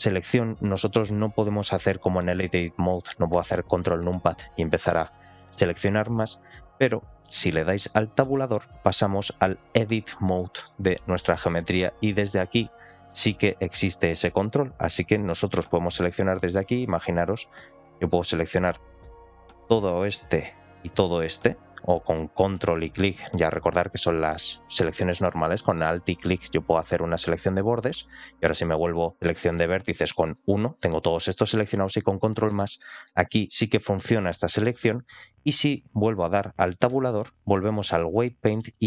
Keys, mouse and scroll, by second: 2.3 ctrl+KP_Add, 2.5 ctrl+KP_Add, 3.2 ctrl+KP_Add, 3.6 ctrl+KP_Add, 8.1 Tab, 9.5-10.2 scroll down 3, 10.2 shift+middle click, 10.7-11.5 scroll down 3, 11.2 middle click, 11.7-12.7 scroll up 1, 12.7 1, 14.7 scroll up 1, 15.1 shift+middle click, 18.1 ctrl+click, 19.2 click, 20.9 ctrl+shift+click, 22.4 ctrl+click, 25.9 2, 27.4 alt+click, 30.2 1, 32.4 ctrl+KP_Add, 32.9 ctrl+KP_Add, 34.4 ctrl+KP_Add, 36.8 Tab, 38.1 scroll down 2, 38.5 shift+middle click.